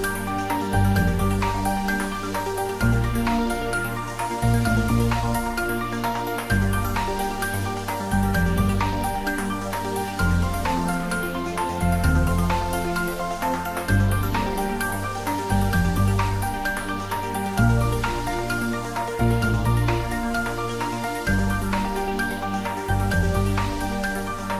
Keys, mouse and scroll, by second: 2.7-3.1 scroll up 1, 3.6 middle click, 4.9 scroll up 1, 5.6-6.0 scroll down 1, 6.3-8.3 middle drag, 8.3-8.9 scroll up 1, 8.9 click, 12.7 scroll up 1, 13.9-16.7 scroll down 1, 16.9-18.8 scroll down 1, 21.0 scroll down 1, 21.1-22.0 scroll up 1, 22.4-24.3 middle drag, 24.4-24.5 scroll up 1.